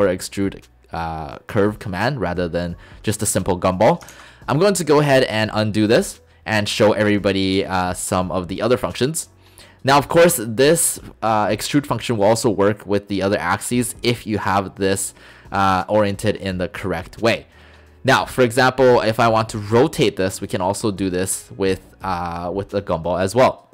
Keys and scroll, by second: 4.1 ctrl+z.